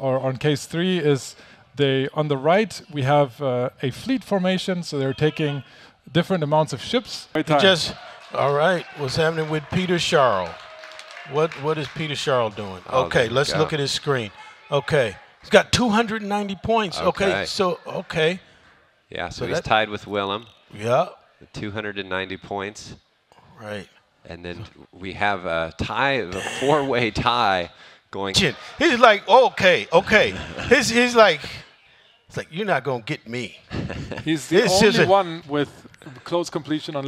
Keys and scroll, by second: 1.5 ctrl+Left, 1.8 ctrl+Page_Down, 2.2 Left, 3.1 Up, 3.1 ctrl+space, 4.0 ctrl+c, 4.0 Left, 4.1 Left, 4.2 ctrl+v, 4.4 Left, 4.5 Escape, 5.7 ctrl+shift+d, 6.0 Left, 6.1 Right, 6.7 ctrl+Page_Up, 7.3 v, 7.8 ctrl+Page_Up, 8.0 ctrl+Page_Up, 9.4 ctrl+Page_Down, 9.5 ctrl+Page_Down, 9.8 alt+Tab, 32.6 Return, 32.6-37.0 typing.